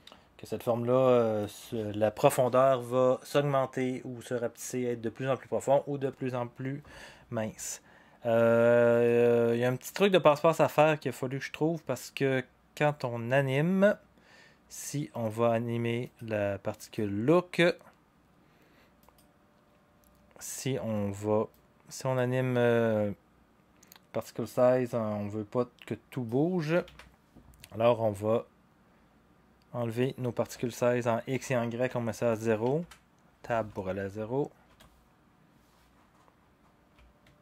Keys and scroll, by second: 26.8 ctrl+z, 31.9 0, 32.8 Tab, 34.0 0, 34.6 Return.